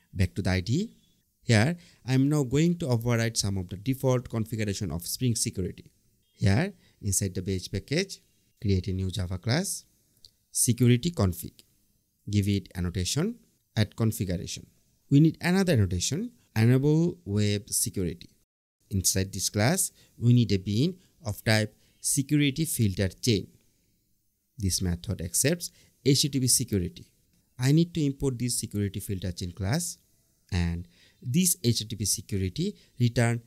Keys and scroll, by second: 4.2 super+n, 5.2 Return, 10.7 Return, 12.0 super+1, 12.6 Up, 12.9 Return, 16.5 Return, 16.9 Tab, 18.9 Return, 20.6 Return, 24.1 Tab, 31.6 Return, 32.8 Return.